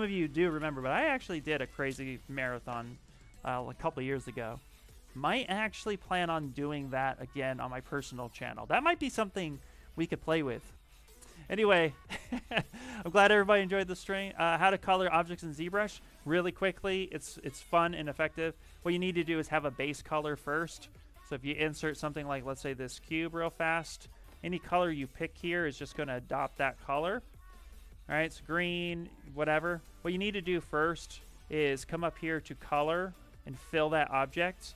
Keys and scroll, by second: 26.8 f, 27.2 f.